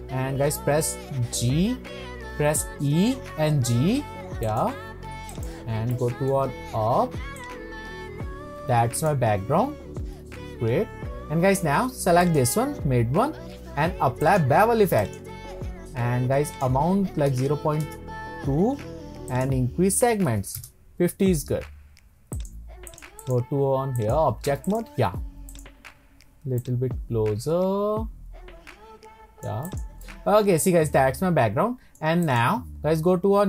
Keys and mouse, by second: 1.4 e, 3.7 g, 4.5 click, 5.3 click, 6.0 shift+click, 7.4-9.1 drag, 14.3 click, 16.5-18.9 drag, 19.3-21.5 drag, 22.4 click, 22.9 click, 23.2-24.2 drag, 24.7 click, 25.5 click, 26.6-27.9 drag, 28.5 click, 30.2-32.0 middle drag.